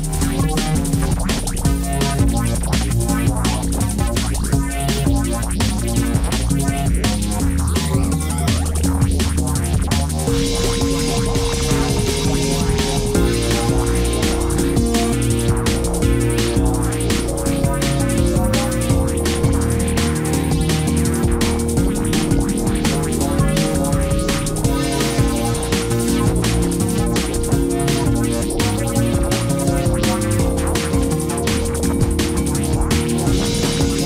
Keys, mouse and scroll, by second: 17.8 ctrl+i.